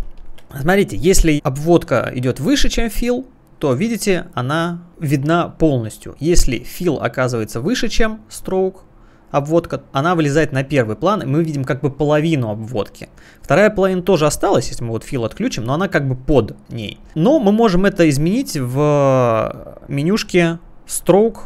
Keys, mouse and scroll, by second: 0.5 space, 1.3 click, 3.0 click, 6.9 click, 9.2 click, 15.2 click, 17.0 click, 17.7 click, 19.7 click.